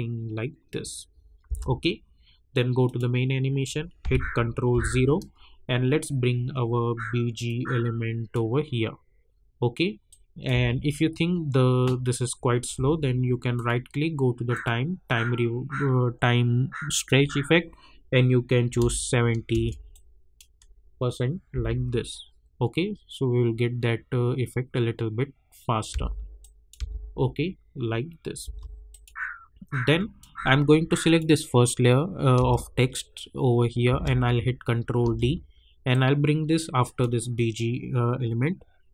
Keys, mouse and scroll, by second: 1.4 space, 2.8 click, 7.4-10.5 drag, 10.5 space, 13.5 right click, 14.5 click, 16.9 click, 19.5 Return, 19.9-21.5 drag, 21.5 space, 25.9 space, 26.4 click, 26.7 space, 28.9 click, 32.3 space, 35.0 ctrl+d, 35.9-38.9 drag.